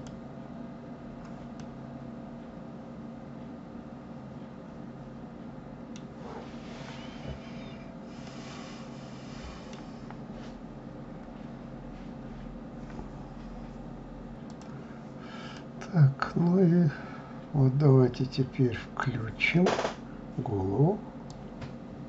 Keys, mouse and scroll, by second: 1.4-4.4 middle drag, 8.1-11.1 middle drag, 15.3-18.3 middle drag, 21.1-22.0 drag.